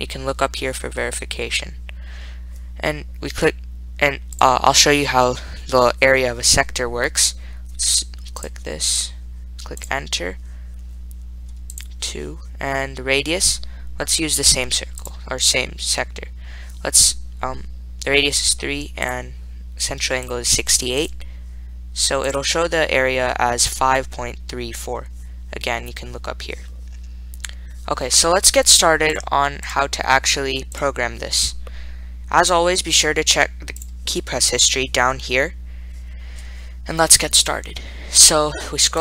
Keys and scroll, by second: 8.7 Return, 10.0 Return, 12.0 2, 15.3 3, 19.4 Return, 20.6 6, 21.3 8, 22.5 Return.